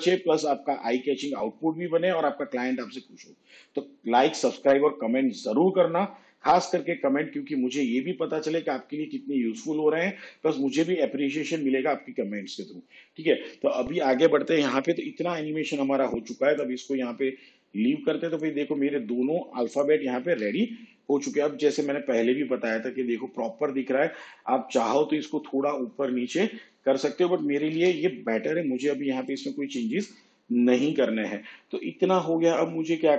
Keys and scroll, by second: 27.8 shift+/.